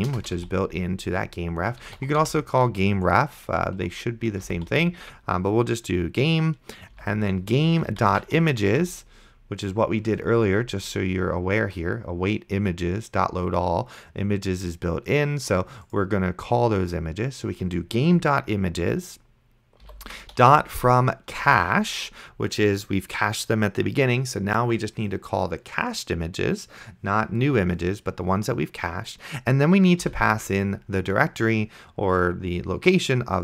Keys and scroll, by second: 0.0-2.8 typing, 3.8 ctrl+z, 4.2-5.2 typing, 7.0-9.2 typing, 19.9-21.0 typing, 21.4 Return, 30.3 :.